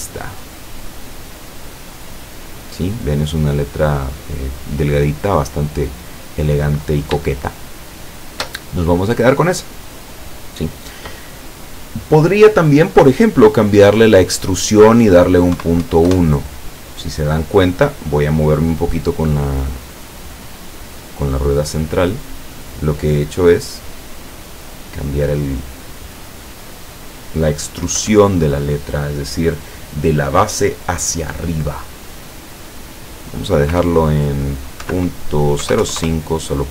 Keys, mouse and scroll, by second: 0.9 click, 2.2-2.7 scroll up 1, 3.1-3.6 scroll down 4, 4.0-7.2 scroll up 4, 7.2-7.6 shift+scroll up 1, 7.6-8.6 shift+middle drag, 14.3 click, 15.6 KP_Decimal, 15.8 KP_1, 20.1-27.1 middle drag, 28.0 KP_7, 33.1 click, 34.9 KP_Decimal, 35.7 KP_0, 35.8 KP_5, 36.0 KP_Enter.